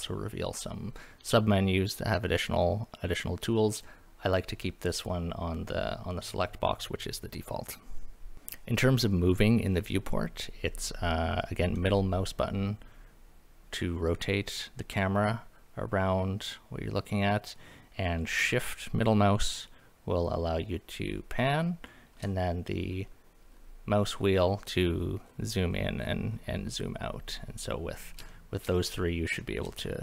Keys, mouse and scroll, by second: 11.8-17.7 middle drag, 19.5-22.1 shift+middle drag, 22.8-23.4 scroll down 4, 23.4 scroll up 4, 24.0-24.4 scroll down 3, 24.4-24.9 scroll up 4, 24.9-25.2 scroll down 2, 25.2-26.0 scroll up 6, 26.0-26.7 scroll down 4, 26.7-27.2 scroll up 4, 27.3-28.0 middle drag, 28.3 shift+middle drag, 28.9 middle drag, 29.4 shift+middle drag, 29.8-30.0 scroll down 2.